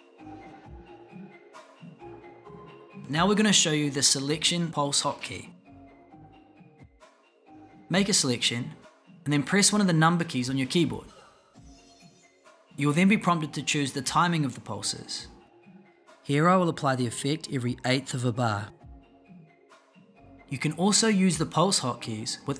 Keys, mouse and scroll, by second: 9.9 1.